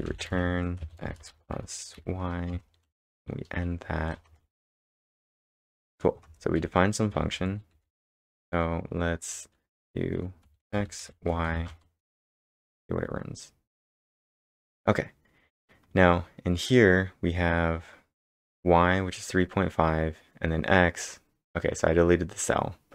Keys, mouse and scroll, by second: 0.0-3.6 typing, 2.5 Return, 4.3 ctrl+Return, 5.5 b, 6.2 ctrl+Return, 7.1-8.2 typing, 10.5 x, 10.7 space, 11.0 y, 11.5 shift+), 12.2 ctrl+Return, 13.4 scroll down 1, 13.7 scroll up 1.